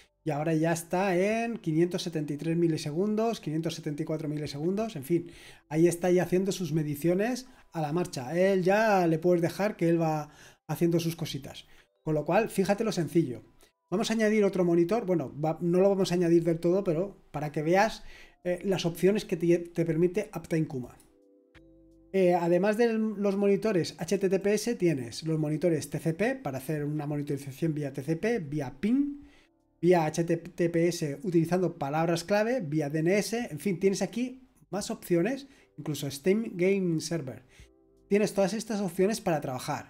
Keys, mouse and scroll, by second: 12.9-17.8 scroll up 2, 20.8 click, 24.4 click.